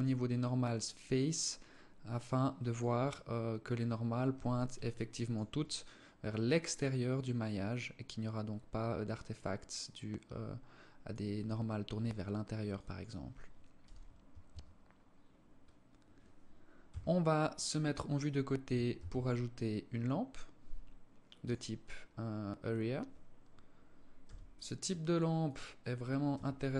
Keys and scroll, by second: 13.2 n, 13.9 Tab, 16.3 KP_3, 18.4 shift+a, 23.7 g, 25.7 r.